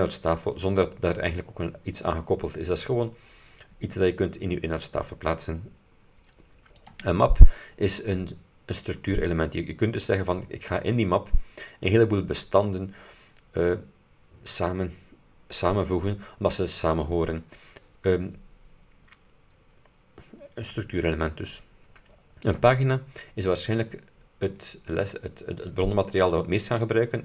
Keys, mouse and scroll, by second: 6.9 click, 22.5 click, 23.9-24.4 scroll down 2.